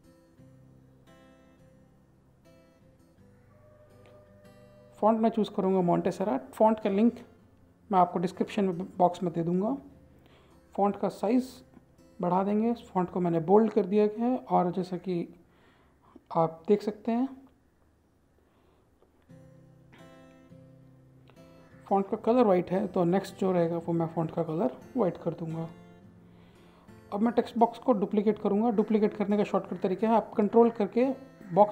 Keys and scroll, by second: 1.1 alt+Tab, 2.6 ctrl+v, 4.3 ctrl+a, 6.3-10.2 typing, 8.9 Return.